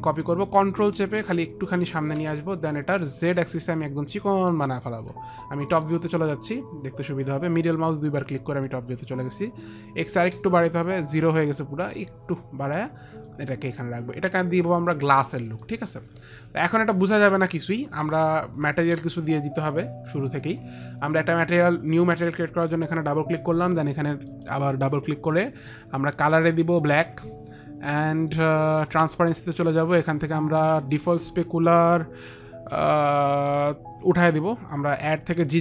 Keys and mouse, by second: 1.3 ctrl+click, 3.7 ctrl+click, 5.7 middle click, 5.7 click, 6.0 middle click, 7.9 click, 11.7 click, 13.8 click, 15.9 middle click, 15.9 click, 16.4 middle click, 20.6 click, 20.6 middle click, 26.7 click, 28.7 click, 30.9 click, 31.2 click, 34.3 Delete, 35.4 Delete.